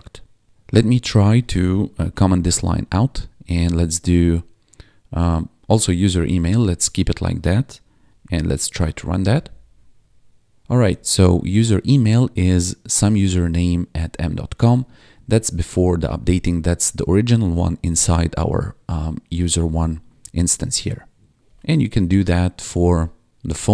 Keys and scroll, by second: 1.9 ctrl+/, 2.1 ctrl+s, 2.7 Down, 3.2 ctrl+Right, 5.5 ctrl+s, 6.8 Left, 8.0 ctrl+`, 8.6 Up, 9.2 Return, 10.5 ctrl+`, 10.8 1, 14.3 1, 14.8 ctrl+`, 21.4 ctrl+/, 21.9 ctrl+s.